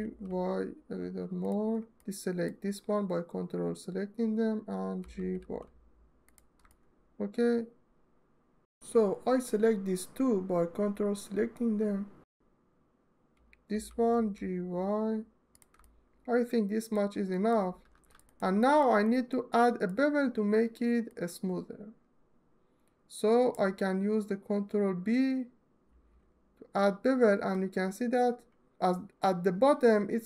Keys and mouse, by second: 1.1 click, 1.7 click, 4.6 g, 5.0 y, 6.3 alt+middle click, 10.5-11.6 ctrl+drag, 13.3 g, 13.8 y, 15.2 click, 15.5-16.6 middle drag, 17.0 middle click, 17.6 2, 17.9 click, 18.4 middle click, 18.8 middle click, 25.5 ctrl+b.